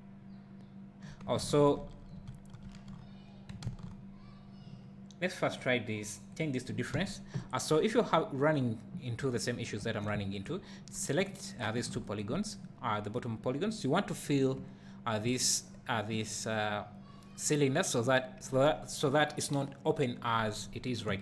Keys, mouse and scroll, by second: 1.5 ctrl+z, 6.6 click, 7.0 alt+a, 9.2 Tab, 10.5 alt+click, 11.6 alt+shift+click, 12.6-21.2 right drag, 14.6 `.